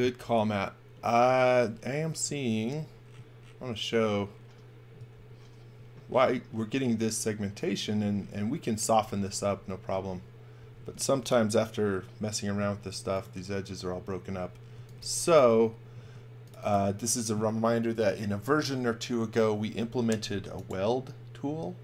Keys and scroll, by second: 5.1 super+z, 9.0 super+z, 12.6 space, 14.5-16.0 typing.